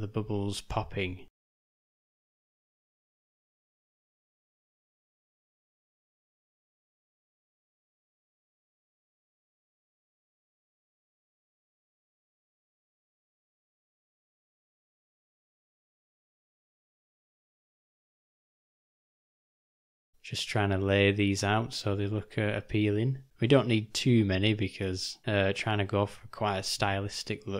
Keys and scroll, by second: 3.9 ctrl+alt+-, 8.9 g, 12.9 s, 15.1 alt+d, 17.4 s.